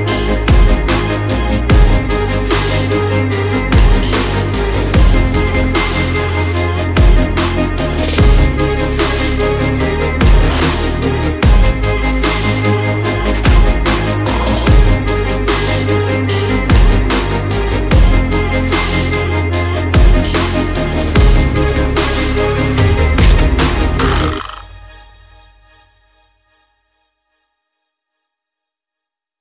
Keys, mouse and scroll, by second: 5.9 s, 9.3 KP_0, 12.0 ctrl+s, 15.5 s, 19.1 s, 23.4 ctrl+s, 24.6 z, 25.6 z, 26.5 KP_0.